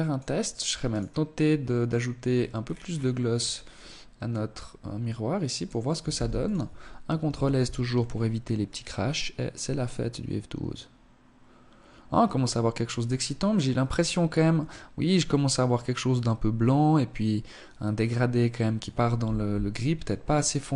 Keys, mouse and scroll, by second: 1.2-3.0 scroll down 14, 3.2 click, 5.1 ctrl+s, 18.6 Escape, 19.3 right click, 20.1 KP_3.